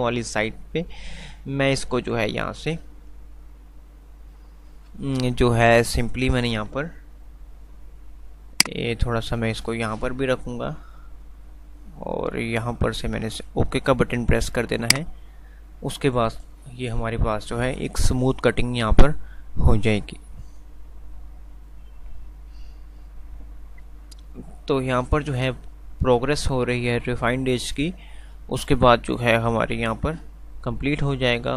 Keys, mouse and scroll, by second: 8.5-10.3 shift+drag, 15.0 shift+click.